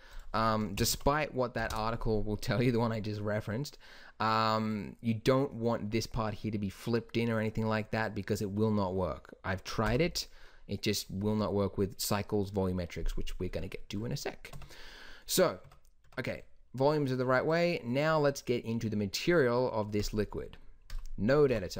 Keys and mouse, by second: 10.0 n, 13.6 middle click, 14.7 Tab, 15.8 Tab, 16.2 Tab, 21.6 n.